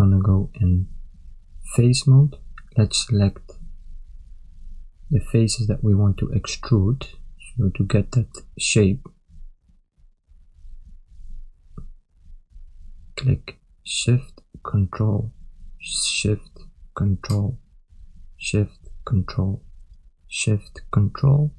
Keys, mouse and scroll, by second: 0.4 ctrl+middle click, 1.9 click, 3.1 ctrl+click, 4.1 shift+click, 4.8 ctrl+click, 6.1 shift+click, 6.9 ctrl+click, 7.7 shift+click, 8.8 ctrl+click, 9.8 shift+click, 10.7 ctrl+click, 11.6 shift+click, 12.6 ctrl+click, 13.4 shift+click, 14.6 ctrl+click, 15.9 shift+click, 16.9 ctrl+click, 18.0 shift+click, 19.3 ctrl+click, 19.9 shift+click, 20.8 ctrl+click.